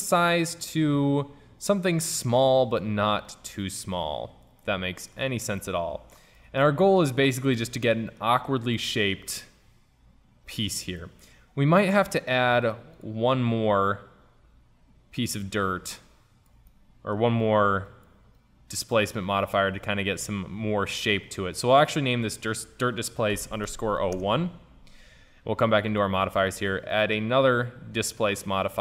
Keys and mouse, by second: 3.3-5.2 drag, 5.2-6.2 middle drag, 6.9-11.0 middle drag, 13.0-15.5 drag, 16.7 drag, 16.9-18.0 middle drag, 18.0-20.3 drag, 21.8-23.7 drag, 26.0-28.8 drag.